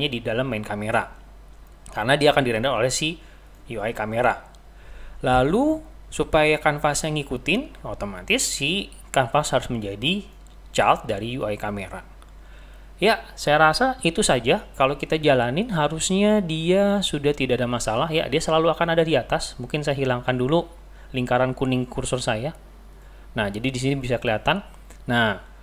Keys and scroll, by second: 17.5 typing.